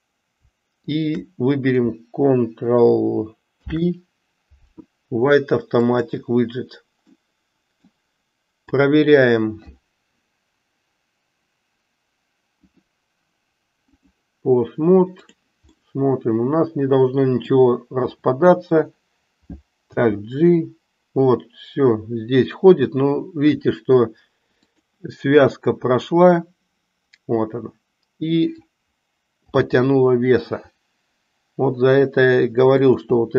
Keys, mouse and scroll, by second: 0.9 shift+click, 3.5 ctrl+p, 7.1-8.0 middle drag, 8.6 click, 12.6-14.3 drag, 15.1 click, 15.9-17.6 middle drag, 19.9 g, 29.5 g.